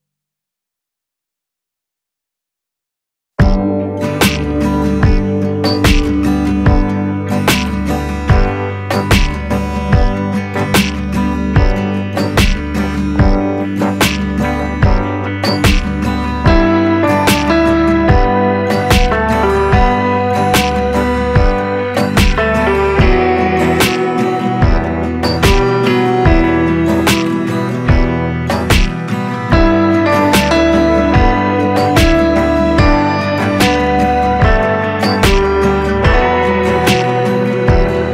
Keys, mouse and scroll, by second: 0.4 click, 5.6-11.5 drag, 11.5 Delete, 13.5 click, 17.5-24.7 drag, 24.7-38.1 drag.